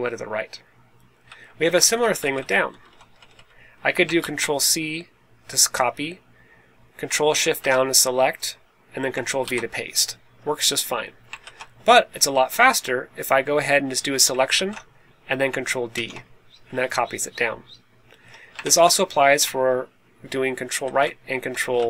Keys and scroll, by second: 1.2 Down, 1.5 1, 1.7 Down, 1.8 1, 2.0 Down, 2.0 1, 2.6 Up, 2.8 Up, 2.9 Up, 3.1 Up, 3.2 Up, 4.1 super+c, 7.3 shift+super+Down, 9.3 super+v, 11.3 super+z, 11.8 Up, 12.2 Down, 14.4 shift+super+Down, 15.8 super+d, 18.5 shift+super+Right, 20.7 super+r.